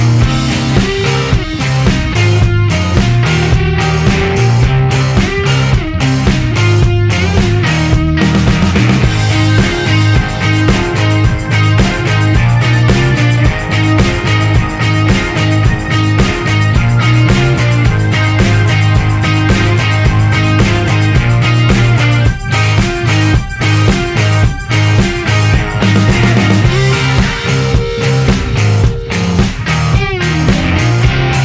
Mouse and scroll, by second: 1.0 right click, 2.9-5.7 drag, 6.1 right click, 7.8 click, 8.9 click, 9.6 click, 11.3 click, 11.7-13.3 right drag, 13.8-15.8 right drag, 16.8 click, 17.5 right click, 19.0-20.9 drag, 21.8-25.7 drag, 26.7 click, 28.9-30.9 drag.